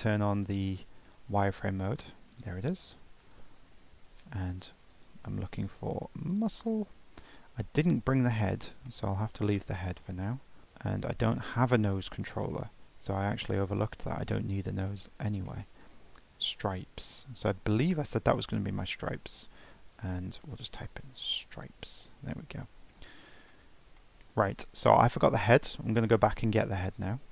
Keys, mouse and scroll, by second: 2.3 click, 4.9-7.9 drag, 8.3 scroll down 2, 8.9-9.3 shift+middle drag, 9.3-11.5 scroll up 1, 14.1-15.8 shift+middle drag, 15.8 scroll down 1, 15.9-16.9 scroll up 2, 17.1 click, 17.9-18.8 shift+middle drag, 18.8 scroll up 2, 19.9-22.4 drag, 22.4-23.2 scroll down 4, 23.2 scroll up 2, 23.5-24.3 middle drag, 24.3 scroll down 1, 24.5-25.6 middle drag, 25.6 Tab, 26.0-26.4 scroll down 1, 26.4 Tab.